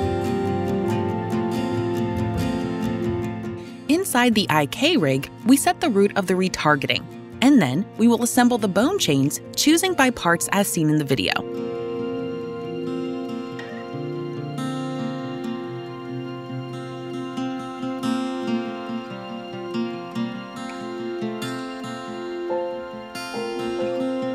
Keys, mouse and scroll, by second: 6.2 click, 7.4 middle click, 8.8 click, 11.5 right click, 15.2 click, 19.1 click, 19.9 ctrl+click, 20.8 click, 21.2 click.